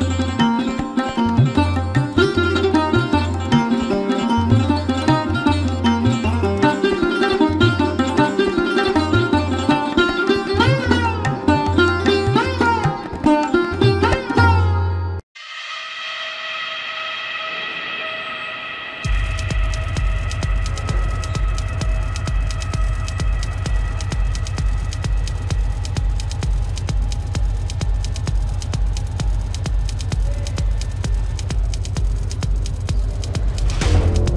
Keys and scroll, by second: 7.1 ctrl+=, 7.4 ctrl+=, 11.7 ctrl+=, 27.0 ].